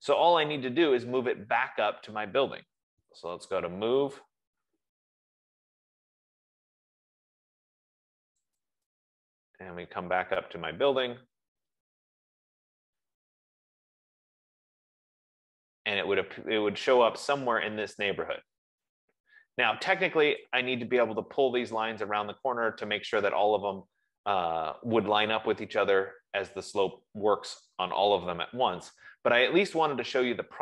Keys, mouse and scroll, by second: 2.2 scroll, 3.0-4.0 typing, 9.0 click, 10.1-10.4 scroll, 11.2 scroll, 20.8 click, 21.9-22.4 scroll, 22.7 scroll, 24.3 Escape, 24.9-25.4 scroll, 29.7-30.4 scroll.